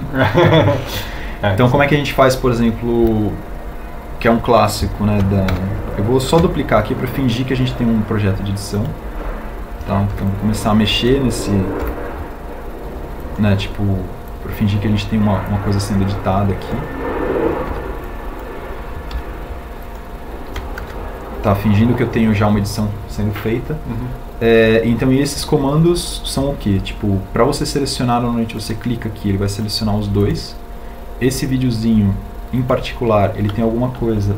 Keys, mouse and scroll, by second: 6.7 a, 8.0 shift+d, 11.1 b, 13.1 g, 15.5 g, 19.2 b, 22.1 alt+e.